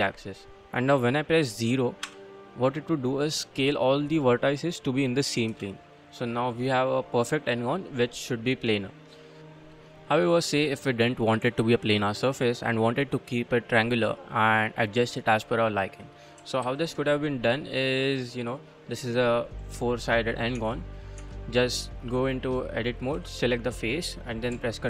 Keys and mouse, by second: 2.1 0, 5.5 Return, 5.9-7.1 drag, 7.7 click, 11.8 middle click, 13.9-15.0 middle drag, 15.3 middle click, 16.6 ctrl+z, 17.2-18.6 middle drag, 18.8-20.5 middle drag, 20.6 Tab, 20.9 middle click, 21.2 Tab, 22.0 middle click, 23.1 3, 23.4 click.